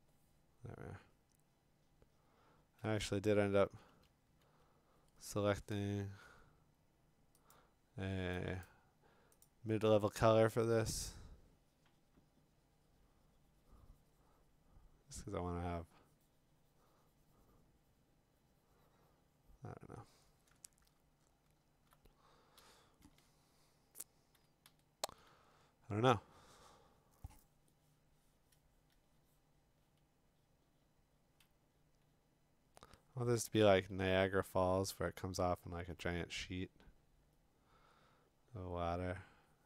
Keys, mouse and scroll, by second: 4.0 [, 7.5 click, 8.6 click, 9.4 click, 20.8 click, 20.9-21.5 scroll, 21.5-21.9 scroll down 9, 21.8 scroll up 3, 22.6-25.2 typing, 24.7-26.0 scroll, 32.9-33.6 [.